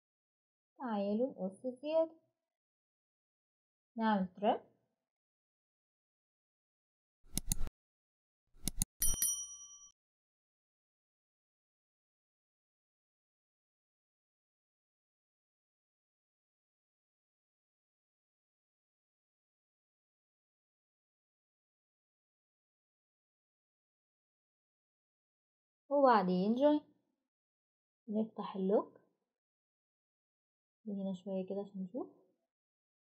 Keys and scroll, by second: 26.2 typing.